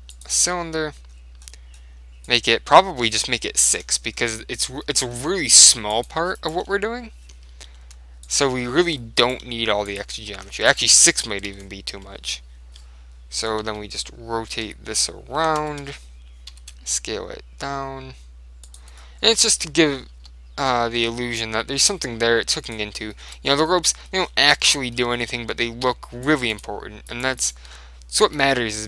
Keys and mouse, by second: 1.2-3.8 middle drag, 2.3 click, 4.2-6.7 middle drag, 6.0 click, 6.5-8.2 right drag, 7.9 Delete, 8.8-12.0 middle drag, 9.3-12.1 right drag, 9.5 Delete, 11.6 ctrl+l, 12.1 middle click, 12.3 KP_7, 12.5 right click, 12.6 middle click, 13.8 KP_3, 14.8 r, 16.6 s, 18.8 click, 19.2-20.6 middle drag, 20.3 ctrl+z, 21.1 s, 22.8 click, 24.8-26.4 middle drag, 26.4 click, 27.2-28.4 right drag, 28.4 f, 28.7-28.8 middle drag.